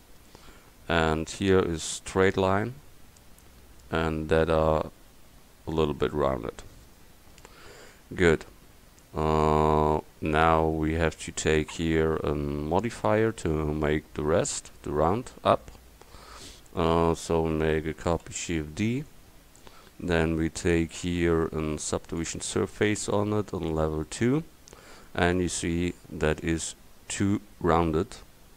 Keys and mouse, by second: 15.5 Tab, 18.3 shift+d, 24.4 click, 24.9 click, 25.0-26.4 middle drag.